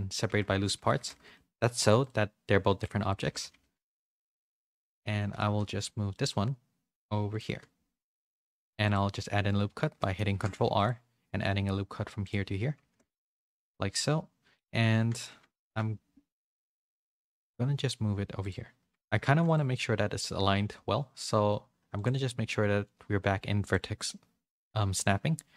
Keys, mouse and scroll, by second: 0.2 Tab, 0.7 z, 0.9 a, 1.1 a, 1.3 middle click, 2.8 click, 3.3 Tab, 3.4-6.2 typing, 7.4 z, 8.5 ctrl+r, 10.0 middle click, 10.3 ctrl+z, 10.6 ctrl+r, 13.2-14.6 middle drag, 15.2 KP_1, 15.6 KP_3, 16.6 z, 17.0 g, 18.9 a, 19.1 a, 19.2 c, 22.0-25.2 drag.